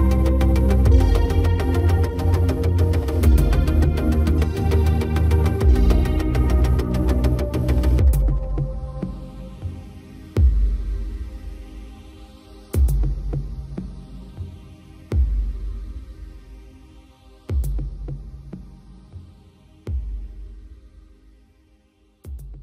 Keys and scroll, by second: 21.6 ctrl+t.